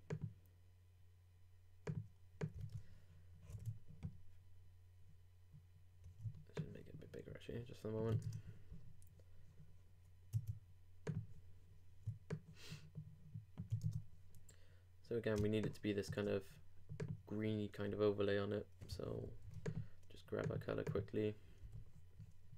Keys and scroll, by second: 3.5 super+Tab, 9.1 shift+Return, 19.2 alt+super+f.